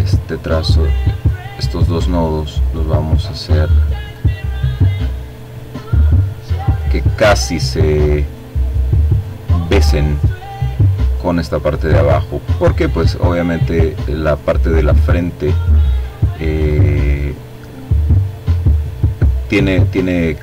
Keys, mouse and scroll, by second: 3.1-5.6 drag, 6.8-8.0 drag, 8.4-10.0 drag, 10.6-12.5 drag, 13.1-14.5 drag, 14.9-16.4 drag, 16.7-18.2 drag, 18.3-19.5 drag, 20.1-20.4 drag.